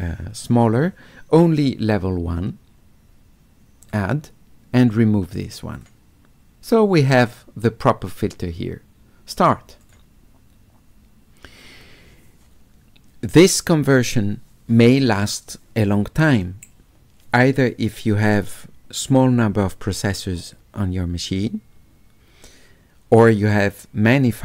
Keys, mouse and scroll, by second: 3.8 click, 4.8 click, 5.8 click, 9.4 click, 9.8 click.